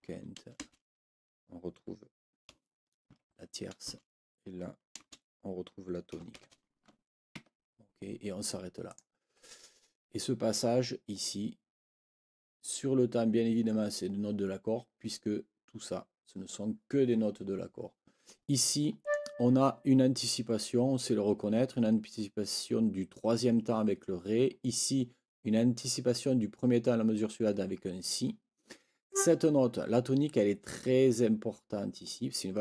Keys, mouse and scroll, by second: 0.6 space, 3.9 space, 5.0 space, 6.3 shift+t, 7.3 Escape, 8.9 click, 19.0 click, 29.1 click.